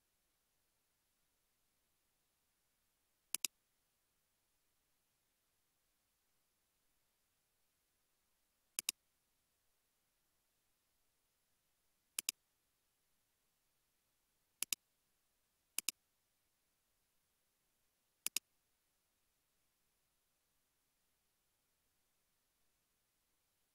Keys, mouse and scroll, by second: 0.7 space, 3.7-5.8 typing, 8.8 ctrl+click, 10.0 typing, 23.1 typing.